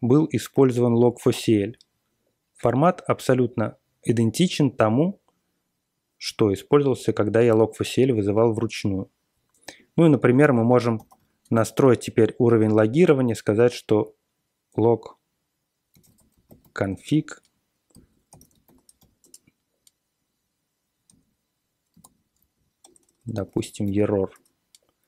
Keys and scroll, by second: 10.4-12.0 typing, 15.6-18.9 typing, 19.2 Return, 21.0 a, 22.0 alt+p, 22.8-25.0 typing.